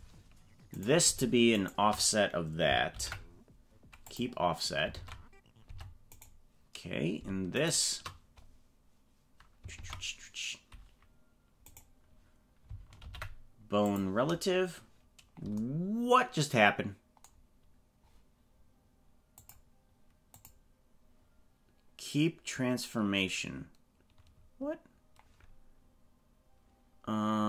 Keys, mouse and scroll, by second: 0.8 right click, 1.6 shift+right click, 2.8 ctrl+p, 4.9 ctrl+Tab, 5.7 Tab, 6.1 right click, 7.5 shift+right click, 9.7 ctrl+Tab, 11.7 right click, 13.1 ctrl+p, 19.5 click, 20.3-22.7 drag.